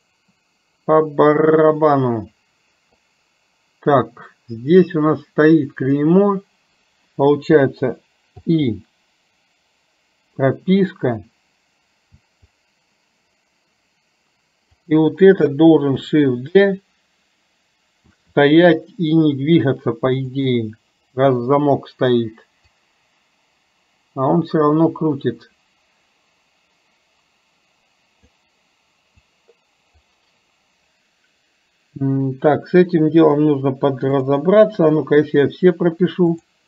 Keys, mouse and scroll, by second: 14.8 click, 22.8-28.5 drag, 29.3 click, 36.4 click.